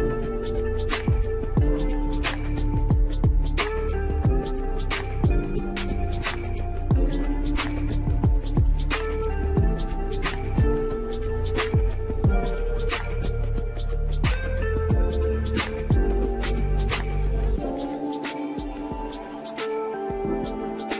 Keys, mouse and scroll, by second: 2.3 s, 5.6-6.0 drag, 8.1-8.6 middle drag, 8.6-9.0 scroll up 2, 9.4 click, 9.9 g, 16.3 click, 20.8 click.